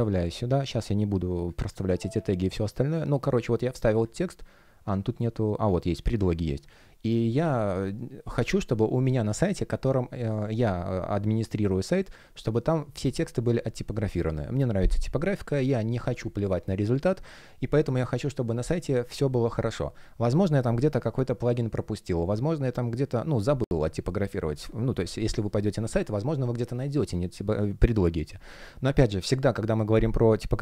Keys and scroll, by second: 0.1 super+v.